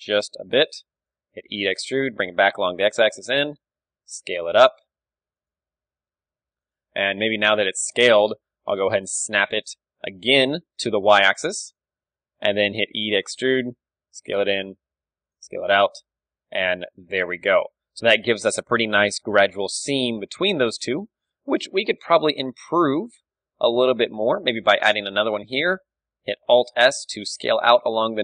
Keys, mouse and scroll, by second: 1.3 e, 3.5-8.7 drag, 3.7 s, 5.6 g, 7.8 ctrl+KP_3, 8.1 z, 8.7 z, 9.3 g, 10.3-12.1 drag, 12.1-13.6 middle drag, 12.5 e, 14.6 click, 14.7 s, 15.5 Tab, 15.6-16.6 drag, 16.6 a, 18.8-20.6 middle drag, 19.4 KP_1, 20.3 Tab, 21.0 z, 21.8 s, 22.8-24.6 drag, 22.9 z, 24.1 a, 24.6 ctrl+r, 24.6 middle click, 25.5 alt+s, 25.5-27.2 drag, 27.4 Tab, 27.4 click.